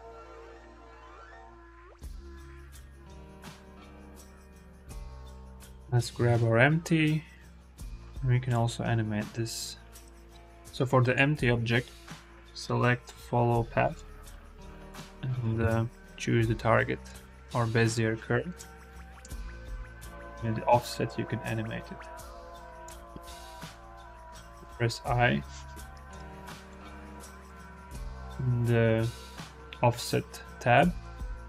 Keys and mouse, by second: 4.0 click, 5.0-5.5 drag, 5.7 click, 6.0 g, 10.0 ctrl+z, 12.0-13.9 drag, 14.7 click, 18.4 space, 18.9 space, 19.4-22.7 drag, 24.0 u, 24.0 i, 25.9 click, 26.5 click, 27.0 click, 30.7-31.4 drag.